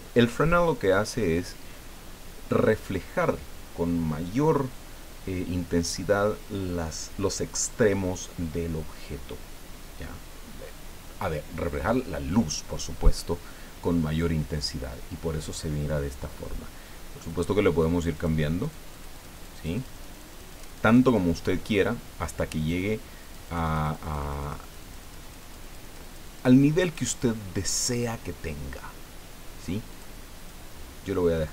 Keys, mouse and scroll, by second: 17.3 click, 18.1 click, 18.6-21.5 drag, 23.2-27.4 drag, 27.8 click, 29.9 click, 30.4 click.